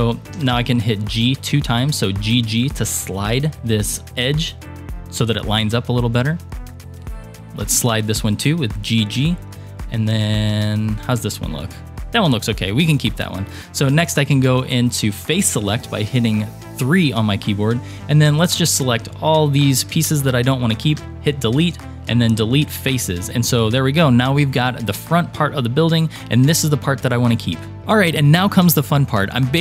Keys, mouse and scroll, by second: 0.4 g, 3.9 scroll down 2, 4.2-5.2 shift+middle drag, 6.2 click, 6.7-7.2 scroll up 1, 7.6 g, 9.7 shift+middle click, 11.1 click, 12.4-13.7 scroll down 7, 14.0 3, 14.4 scroll down 2, 15.3 shift+middle click, 17.4 click, 18.1 shift+click, 18.6 shift+click, 19.0 shift+click, 19.5 shift+click, 21.0 Delete, 23.1 click, 23.5-27.0 middle drag, 27.4-27.8 scroll down 2.